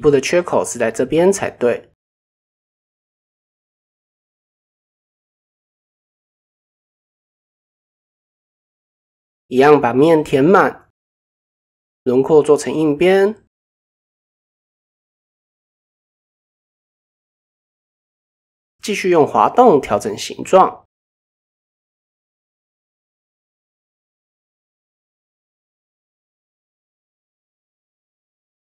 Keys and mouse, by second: 2.7-4.4 middle drag, 4.8 middle click, 6.0 middle click, 9.1 f, 10.4 click, 11.4 shift+click, 13.1 click, 14.6 shift+click, 15.7 click, 16.4 middle click, 17.1 middle click, 17.6 click, 18.5 g, 19.8 g, 21.3 click, 21.5 g, 23.7 middle click, 24.5 g, 26.4 ctrl+r, 27.4 click, 28.3 g.